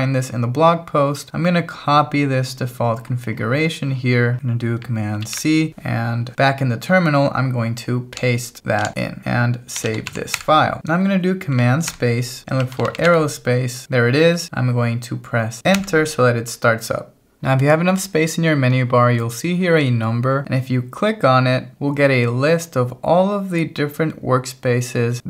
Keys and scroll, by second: 5.2 super+c, 6.3 ctrl+1, 8.9 Escape, 9.2-10.6 typing, 15.8 Return.